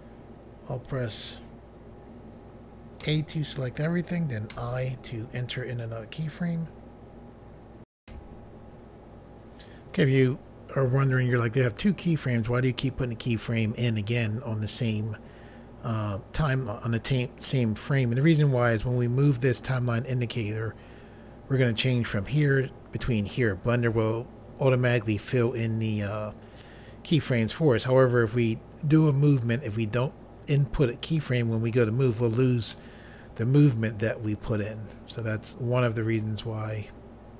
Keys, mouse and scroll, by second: 3.1 a, 4.6 i, 8.0 Pause, 32.7 middle click.